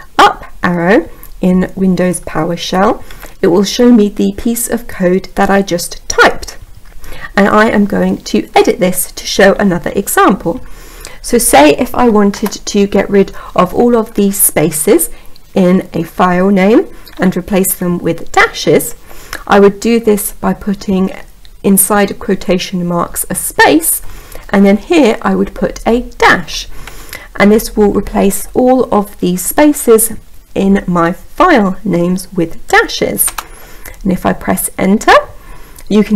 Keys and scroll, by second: 33.3 Return.